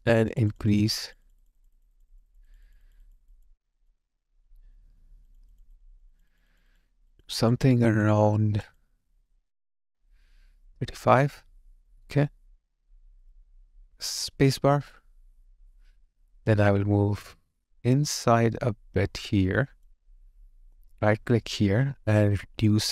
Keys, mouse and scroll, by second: 0.5 double click.